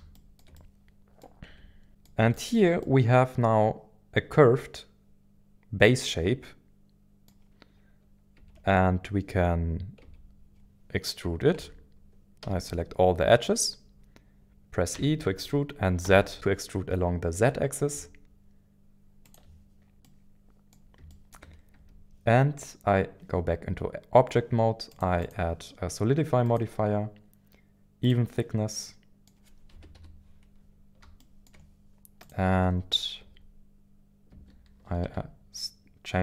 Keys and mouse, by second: 0.1 shift+middle click, 0.6 middle click, 1.5 Tab, 1.9 middle click, 2.3 shift+middle click, 2.8-7.3 middle drag, 8.4 Tab, 10.0 Tab, 11.6 Tab, 12.4 a, 14.9 e, 16.0 z, 19.2 ctrl+click, 20.0 middle click, 21.1 shift+middle click, 21.7 Tab, 24.9 click, 26.5-27.9 drag, 28.0 click, 28.7 middle click, 29.7 KP_1, 29.9 KP_1, 29.9 KP_7, 31.2 shift+middle click, 32.4-36.2 drag.